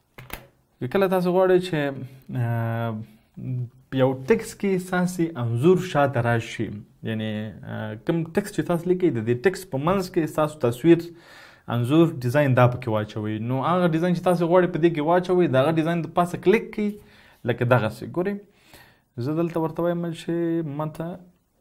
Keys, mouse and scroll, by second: 0.1 ctrl+z, 0.3 ctrl+z, 1.6 ctrl+d.